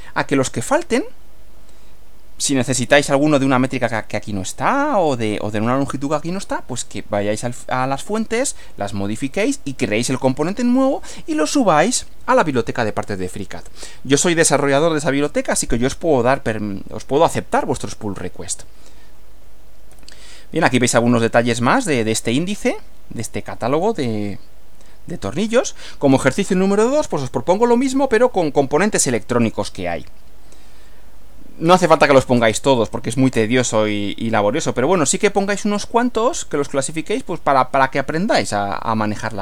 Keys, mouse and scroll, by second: 19.9 Right, 25.4 Right.